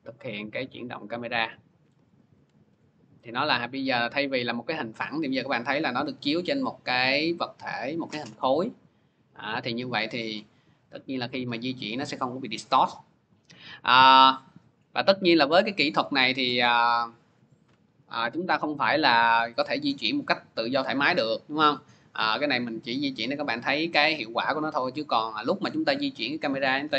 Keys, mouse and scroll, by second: 1.8 click, 2.4 ctrl+z, 6.9 click, 16.4 click, 17.1 ctrl+z, 23.8-26.9 drag.